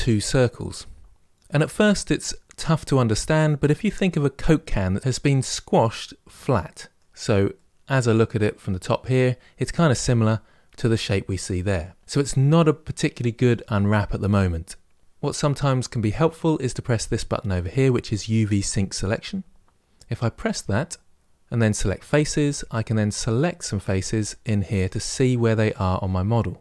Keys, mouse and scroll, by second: 5.0-21.8 middle drag, 21.8 click, 23.0 click, 24.0 click, 24.6 click, 25.0 click, 25.4 click.